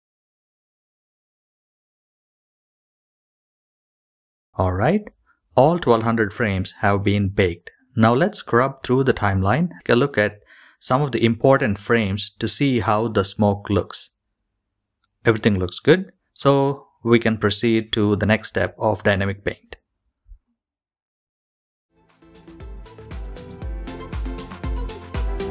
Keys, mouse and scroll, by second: 5.3 KP_0, 6.9-22.5 drag, 11.1 KP_0, 12.8 KP_0, 16.4 KP_0, 19.2 KP_0, 21.4 KP_0, 25.1 click.